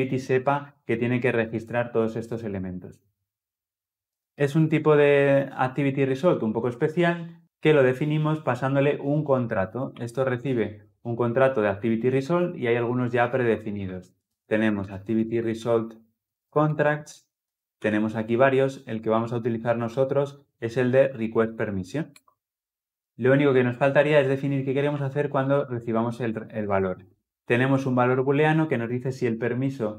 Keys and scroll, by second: 9.7 ctrl+p, 17.4 Return, 22.9 ctrl+z, 26.5 ctrl+alt+l.